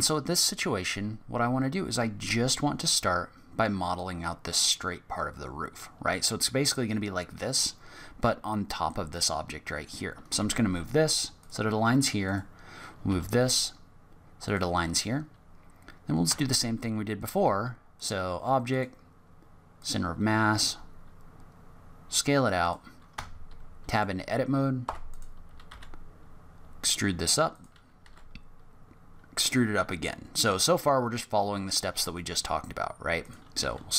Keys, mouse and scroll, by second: 10.3 g, 12.2 click, 13.0 g, 16.2 Tab, 17.9 click, 20.5 s, 23.1 Tab, 23.9 click, 24.8 3, 25.1 click, 25.7 e, 28.0 e, 33.6 s.